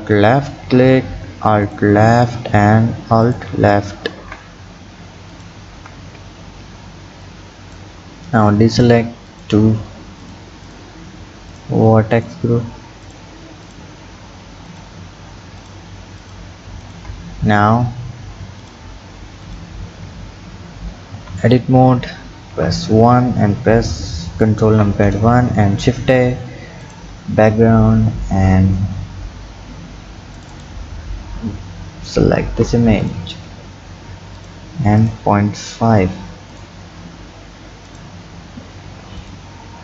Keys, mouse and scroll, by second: 0.1 alt+shift+click, 1.7 alt+shift+click, 3.2 alt+shift+click, 4.1 ctrl+z, 5.3 alt+shift+click, 6.1-7.2 scroll up 1, 7.2 click, 8.7 shift+click, 9.3 shift+click, 10.2 shift+click, 10.6 shift+click, 11.5 shift+click, 12.1 shift+click, 13.1 shift+click, 13.7 shift+click, 14.6 shift+click, 15.6 shift+click, 16.2 shift+click, 16.8 shift+click, 18.6 shift+click, 19.4 shift+click, 21.1 Tab, 22.5 KP_1, 24.7 ctrl+KP_1, 25.4 shift+a, 33.0 click, 34.4 click, 35.0 click, 36.5 click, 37.9 click, 39.1 click.